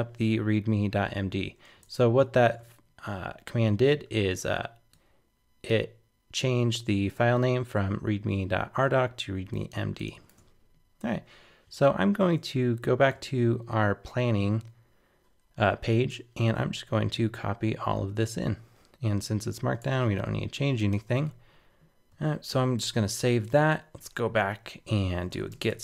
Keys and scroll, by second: 20.1 super+Tab, 21.0 super+a, 21.2 super+v, 22.5 super+s, 22.8 super+Tab.